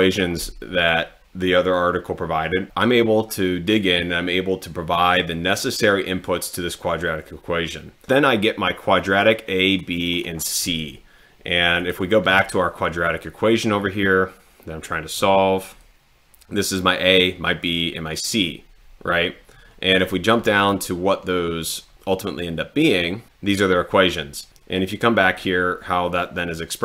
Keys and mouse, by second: 9.1 click, 9.7 click, 10.1 click, 11.8 click, 20.5 middle click, 25.4 click.